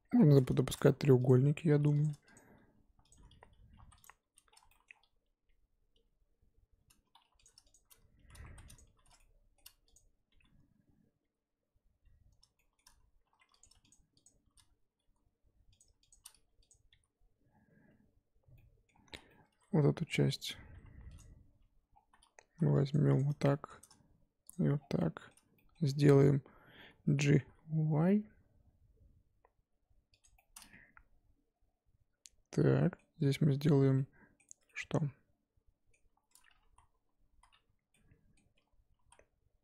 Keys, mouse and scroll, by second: 1.2 click, 1.8 1, 2.0 click, 2.3 shift+click, 3.1 shift+click, 3.4-5.9 typing, 4.0 click, 4.7 shift+middle click, 7.2 1, 7.4 click, 7.7 shift+click, 8.1 f, 8.4 2, 8.7 click, 8.8 f, 9.1 shift+middle click, 9.9 click, 10.3 f, 11.2 f, 12.5 shift+middle click, 13.0-13.6 scroll up 2, 13.6 click, 13.9 shift+click, 14.2 shift+click, 14.9 f, 15.8 click, 16.1 shift+click, 16.3 f, 16.7 click, 16.9 f, 17.5 scroll down 1, 18.5 middle click, 19.1 z, 19.1 scroll down 3, 19.3 middle click, 20.2-21.2 scroll up 4, 20.7 2, 21.2 click, 21.5 f, 21.9-22.3 scroll down 3, 22.4 3, 22.9 click, 23.2 click, 23.4-24.5 shift+middle drag, 24.5 ctrl+click, 24.7 scroll down 5, 25.0 middle click, 25.8-26.4 scroll up 2, 27.3 g, 30.3-33.2 middle drag, 33.2 Tab, 33.9 middle click, 34.4 Tab, 34.7-36.6 middle drag, 36.6 ctrl+z, 36.9 ctrl+z, 37.3 ctrl+z, 37.9 middle click, 38.5 1, 39.0 z.